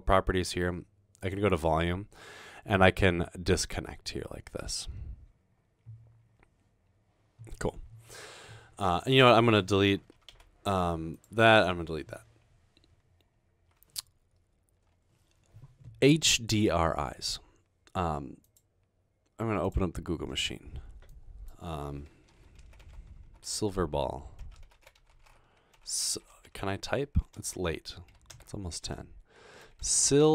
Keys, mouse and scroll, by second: 1.2 click, 10.5 Delete, 11.8 Delete, 22.3-28.3 typing, 29.6-30.3 typing.